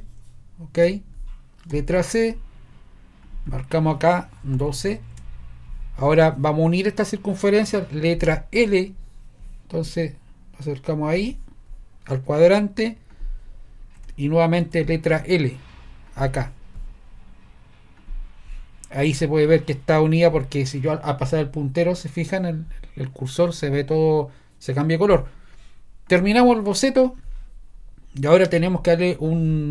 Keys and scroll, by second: 0.0-0.3 typing, 0.8 Return, 1.7 c, 4.2-5.1 typing, 5.1 Return, 8.6 l, 14.0 Escape, 14.6 l, 19.0 Escape.